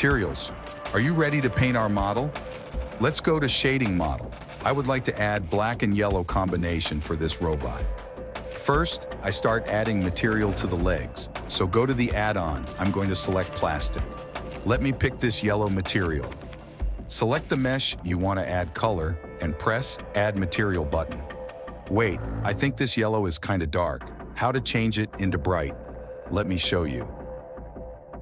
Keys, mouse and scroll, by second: 9.3 n, 9.9 n, 11.0-11.5 shift+middle drag, 11.5 click, 11.6 middle click, 11.8 click, 11.9-13.2 middle drag, 13.2-14.7 drag, 14.7-15.1 middle drag, 15.1-17.3 drag, 18.2-19.7 middle drag, 19.9-23.5 middle drag, 24.1 shift+middle click, 25.1 middle click, 27.1-28.2 middle drag.